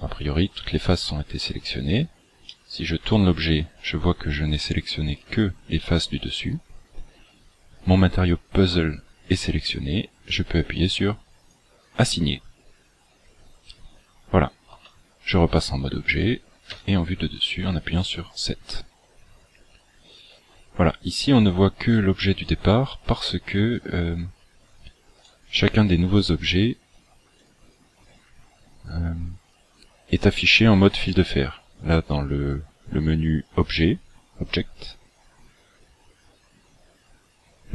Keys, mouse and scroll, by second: 0.3-0.7 scroll down 4, 1.2 scroll up 4, 2.4 middle click, 11.4 click, 14.8 Tab, 16.6 KP_7, 17.8-18.8 scroll down 8, 18.8-19.4 scroll down 4, 20.3-20.6 scroll up 3, 20.9 scroll down 1, 21.9 right click, 25.2 right click, 27.4 click, 34.6-35.2 scroll down 10.